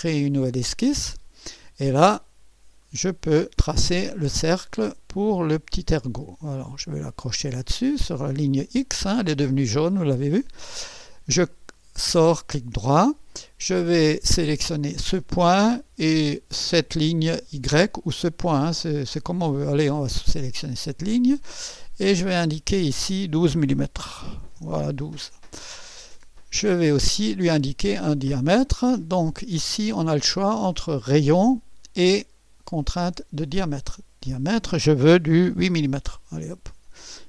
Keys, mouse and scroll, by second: 0.9 click, 2.3 scroll up 2, 2.8 right click, 4.7 click, 6.9 click, 8.4 click, 11.5 right click, 14.7 click, 20.3 click, 22.4 click, 24.1-25.3 typing, 27.2 click, 30.3 click, 33.5 click, 35.5 8, 35.8-37.2 Return.